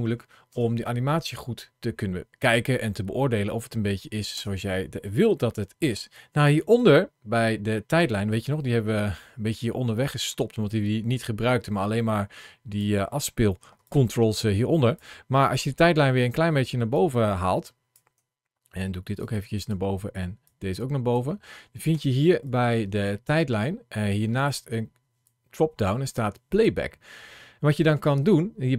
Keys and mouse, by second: 0.3 space, 4.2 space, 5.5 shift+middle click, 7.9-12.7 drag, 13.6 ctrl+shift+a, 16.8 click, 19.0 click, 20.3 click, 22.1 ctrl+shift+a, 26.5-28.7 drag.